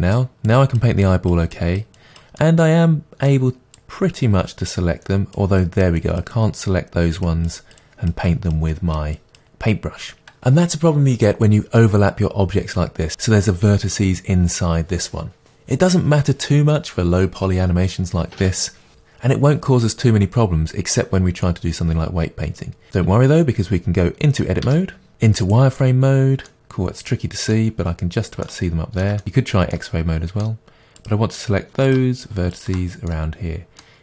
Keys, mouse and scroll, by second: 0.5-2.4 drag, 2.4-3.8 middle drag, 3.8-25.5 drag, 24.7 Tab, 26.5-31.0 middle drag, 27.8-28.5 scroll up 1, 31.0 click, 31.9 shift+click, 32.5 shift+click, 33.1-34.0 middle drag.